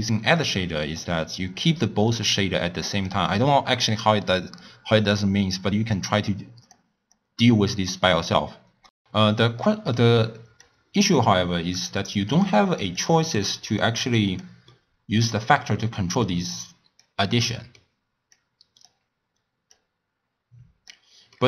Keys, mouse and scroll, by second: 2.9-5.9 drag, 6.2-8.4 drag, 8.4-8.9 scroll up 2, 10.5 click, 11.9 click, 12.9 click, 13.7 click, 16.2 click, 18.3 click, 19.7 click.